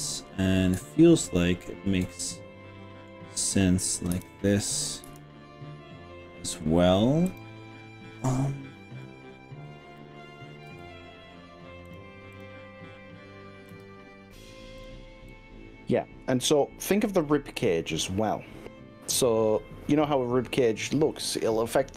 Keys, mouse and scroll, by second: 2.1-3.2 middle drag, 4.1 KP_3, 5.1 KP_1, 7.4 click, 10.8 g, 11.9 click, 13.8 g, 14.8 click, 15.4 click, 17.0 g.